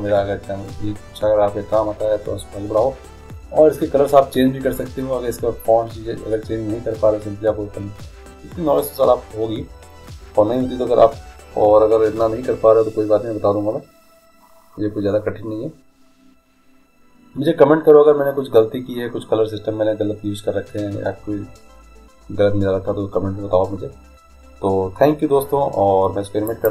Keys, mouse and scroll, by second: 26.5 click.